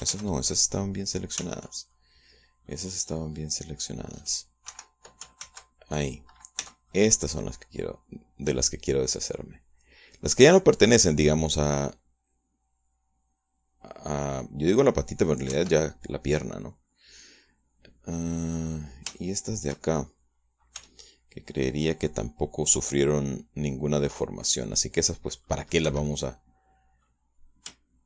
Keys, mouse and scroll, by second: 1.1 ctrl+z, 2.3 ctrl+z, 2.9 ctrl+middle click, 4.7-5.1 scroll down 2, 5.7 Escape, 6.4 ctrl+z, 7.6 c, 7.9-16.4 middle drag, 16.5 Escape, 16.7-19.5 middle drag, 19.6-20.1 scroll up 1, 20.1-21.7 shift+middle drag, 21.7 c, 22.0-26.7 middle drag, 26.9 Escape, 27.1-28.0 middle drag.